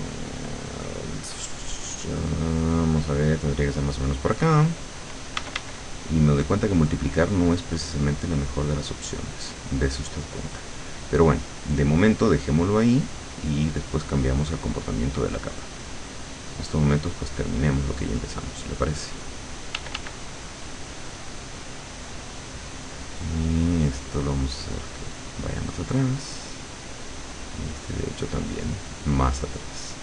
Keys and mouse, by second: 2.8-4.5 drag, 5.4 d, 5.9 click, 12.4-17.9 drag, 18.7 click, 19.8 d, 20.3-22.3 drag, 23.7-25.9 drag, 27.1-30.0 drag.